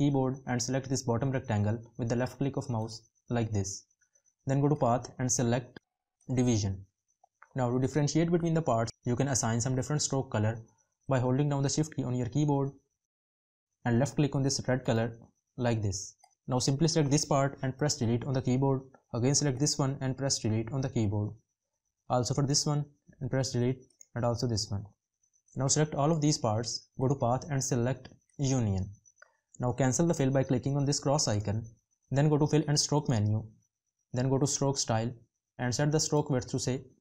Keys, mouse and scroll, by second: 11.0 shift+click.